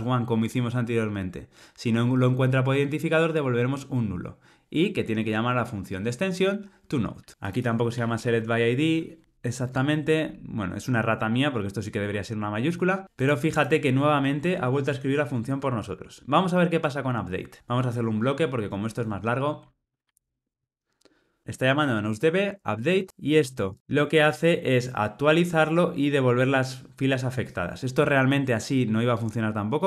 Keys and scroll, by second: 7.3 Tab, 9.6 Tab.